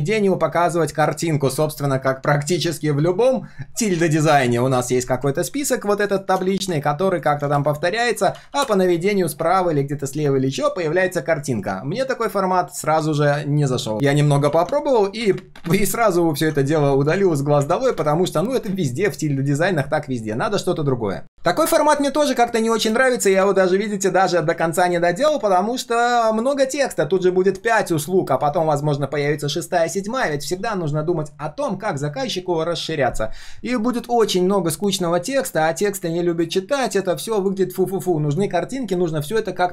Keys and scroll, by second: 8.3 ctrl+d, 8.5 ctrl+d, 13.9 ctrl+z, 14.4 ctrl+z, 24.5 ctrl+d.